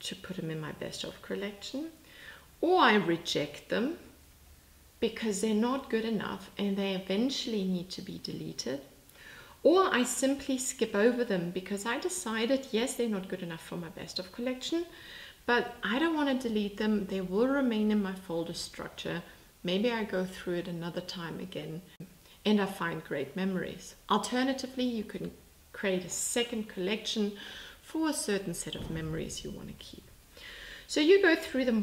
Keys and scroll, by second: 3.2 x.